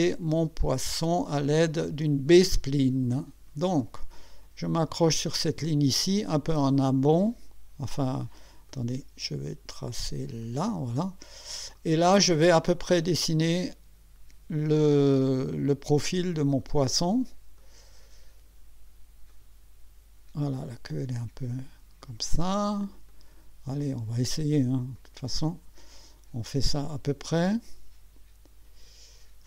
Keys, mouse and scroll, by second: 3.1 click, 6.0-7.5 drag, 8.7 click, 10.4 click, 11.7 click, 12.9 click, 15.3 click, 16.4 click, 17.6 click, 19.3 click, 20.6 click, 22.0 click, 23.1 click, 24.9 click, 26.7 click.